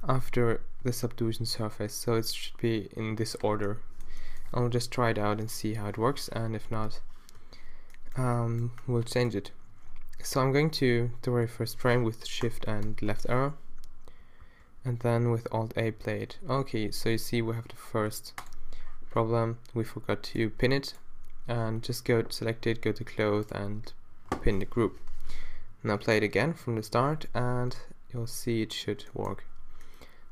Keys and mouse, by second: 3.6-5.3 middle drag, 5.9 Left, 7.4 t, 12.9 shift+Left, 14.4 alt+a, 17.6 alt+a, 25.0 shift+Left, 25.3 alt+a, 29.8 alt+a.